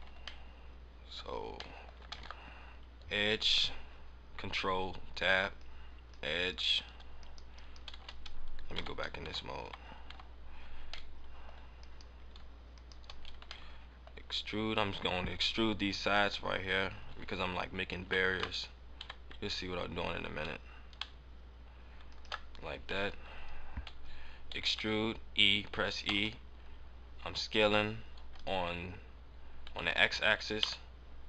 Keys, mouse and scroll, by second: 0.1 scroll up 2, 0.4 middle click, 1.7 middle click, 1.9-4.0 scroll up 2, 2.1 ctrl+Tab, 6.4 right click, 7.1 right click, 7.9-10.1 typing, 10.7-11.1 scroll up 1, 11.1 middle click, 11.7 right click, 12.6 shift+right click, 13.6 middle click, 14.7 middle click, 17.9 e, 22.1 ctrl+shift+click, 22.2 ctrl+shift+click, 24.5 e.